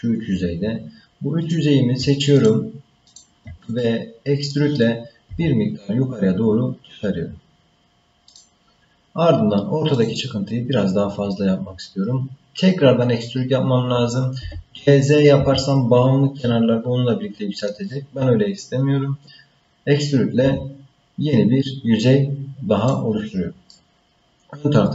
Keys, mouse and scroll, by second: 1.4 click, 2.3 shift+click, 3.1 shift+click, 3.8 middle click, 5.3 e, 10.0 click, 14.4 g, 20.4 e, 23.7-24.9 middle drag.